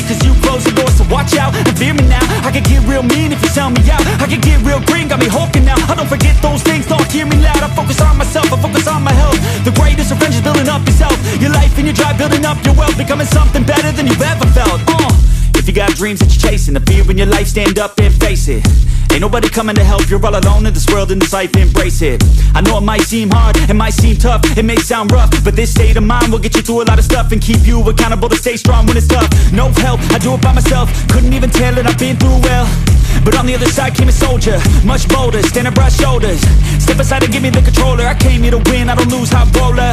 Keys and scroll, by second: 0.0-3.9 typing, 5.1-7.2 typing, 7.8 Return, 9.5 7, 10.2 Return, 11.3 1, 11.8 Return, 13.7 0, 14.4 Return, 22.4-23.2 typing, 25.5-26.4 typing, 26.6 Return.